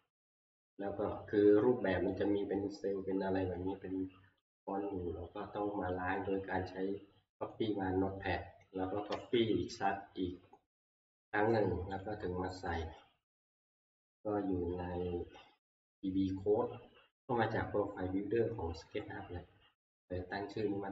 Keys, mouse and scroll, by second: 0.7 click, 7.5 click, 9.1 ctrl+c, 9.1 click, 12.1 click, 16.0 click, 19.0 scroll up 1, 20.6 scroll up 1.